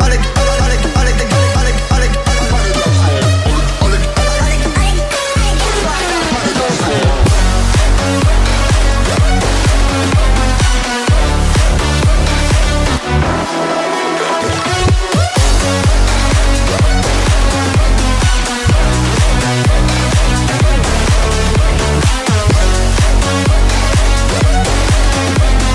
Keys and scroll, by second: 0.2 ctrl+super+z, 8.8 space, 15.3 space, 19.2 space.